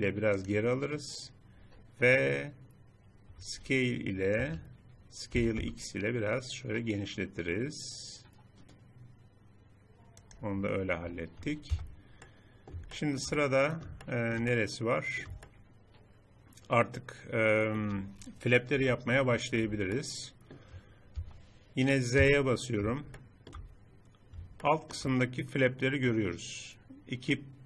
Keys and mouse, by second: 3.4 s, 5.3 s, 11.7 Tab, 18.8 KP_7, 21.2 Tab, 22.2 z, 23.1-24.8 middle drag.